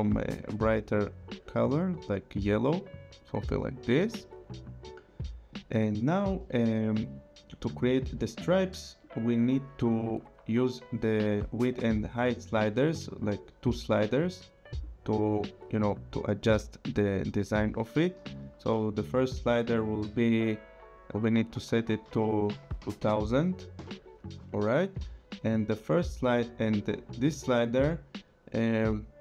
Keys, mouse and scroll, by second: 2.0 click, 9.0 click, 12.6 click, 14.8 click, 21.4 click, 22.0 KP_2, 22.6 KP_0, 23.8 Return, 25.6 click.